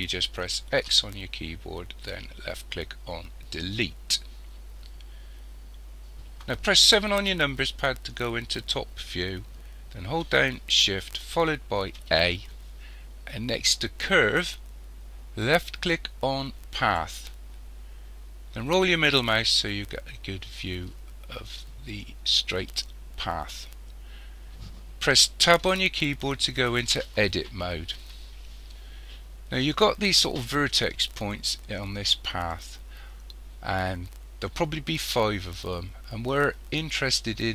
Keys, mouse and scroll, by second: 0.8 x, 7.2 KP_7, 12.0 shift+a, 18.6-19.9 scroll up 8, 20.3 scroll up 1, 25.7 Tab.